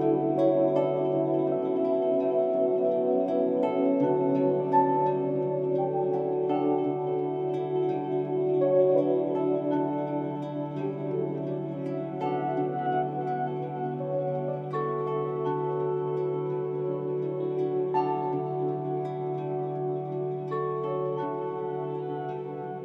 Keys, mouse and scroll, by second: 3.3-12.8 drag, 12.8 right click, 13.4-16.1 drag, 19.4-22.3 drag, 22.3 click.